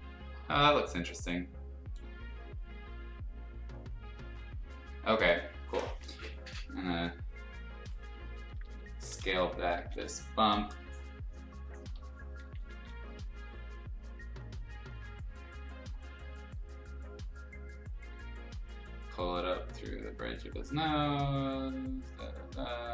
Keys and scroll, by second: 6.5 b, 8.4 ], 8.5 ], 8.7 ], 9.7 ctrl+z, 9.9 x, 11.3-12.7 typing.